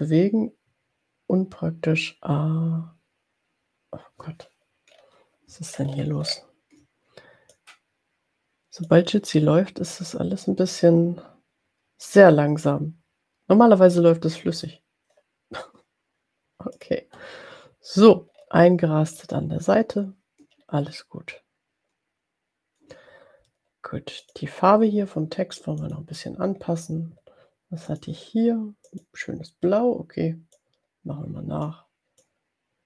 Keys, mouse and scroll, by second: 4.9 scroll down 2, 5.7-6.6 ctrl+scroll up 2, 7.7-9.0 drag, 17.0 click, 18.3-19.5 ctrl+scroll down 4, 20.6-21.3 scroll up 2, 24.4 click, 25.7 click, 27.8 click, 28.9 click, 30.8-31.8 drag.